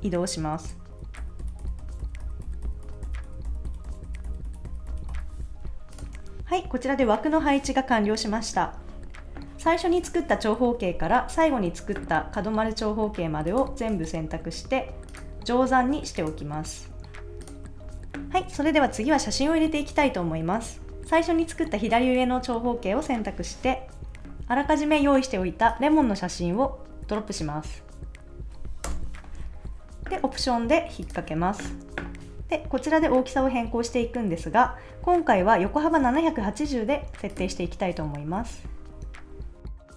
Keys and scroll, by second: 1.2 shift+Down, 6.1 super+s, 17.8 super+s, 28.8 Return.